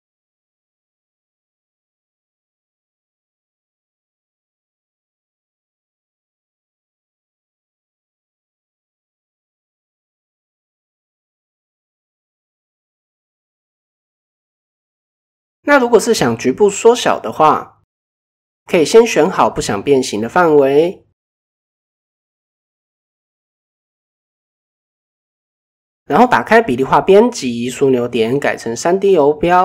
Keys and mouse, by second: 0.8 middle click, 1.6 middle click, 3.2 click, 4.1 click, 4.3-4.8 middle drag, 4.9 middle click, 5.8 g, 7.0 middle click, 7.7 middle click, 8.9 click, 9.4 middle click, 10.2 Tab, 10.5-10.9 middle drag, 11.4 KP_1, 12.7 shift+middle drag, 14.1-14.7 shift+middle drag, 15.1 Tab, 15.7-16.1 middle drag, 16.8 ctrl+KP_7, 20.9 shift+click, 21.3 shift+click, 22.3 middle click, 23.1 middle click, 24.0 ctrl+KP_7, 24.7 shift+middle click, 27.1 click, 27.9-29.0 drag, 29.2-29.6 middle drag.